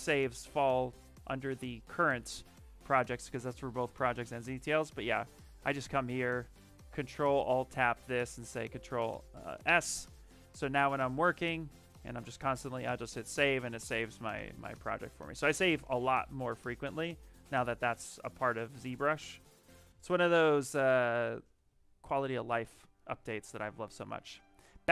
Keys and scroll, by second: 8.4 ctrl+s, 12.4 ctrl+s.